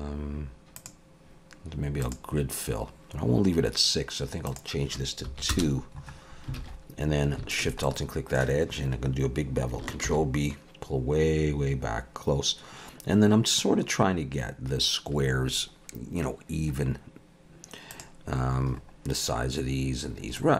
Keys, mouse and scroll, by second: 0.8 click, 4.4 click, 6.6 alt+a, 7.5 alt+shift+click, 7.8 middle click, 10.1 ctrl+b, 18.8-20.4 scroll up 3, 20.4 middle click.